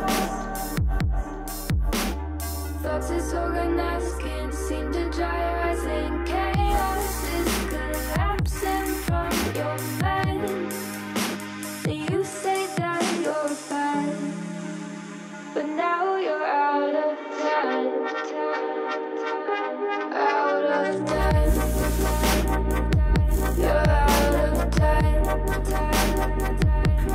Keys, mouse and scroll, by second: 0.8 shift+a, 2.4-3.9 drag, 5.0-10.0 typing, 11.2 g, 12.3 KP_3, 12.9 ctrl+l, 13.7 g, 15.5 s, 17.2 g, 18.3 middle click, 18.8 KP_1, 19.4 scroll up 1, 19.6 middle click, 20.2 3, 20.6 click, 21.2 KP_1, 21.6-22.4 scroll up 3, 22.4 1, 23.1 i, 24.3 e, 26.3 ctrl+KP_Add, 26.6-27.1 scroll down 2.